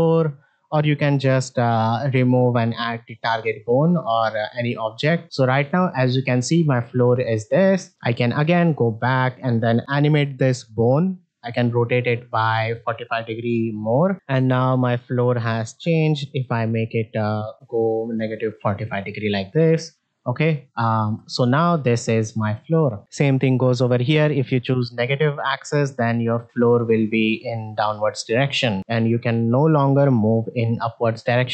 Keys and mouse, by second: 4.4-7.5 drag, 8.7-9.0 middle drag, 10.3 r, 14.1 ctrl+Tab, 14.1 click, 15.4 r, 20.0 click, 20.9 ctrl+Tab, 21.2 click, 21.7-23.0 drag, 24.7 click, 25.4-25.8 middle drag, 26.4-28.8 drag, 29.0-29.8 middle drag, 30.0-30.5 drag.